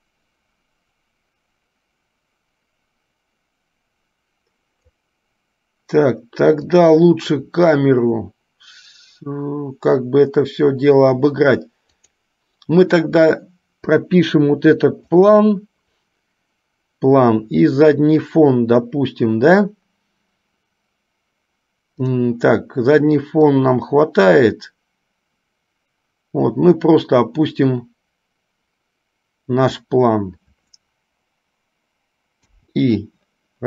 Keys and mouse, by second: 15.3 shift+click, 23.6-30.1 drag.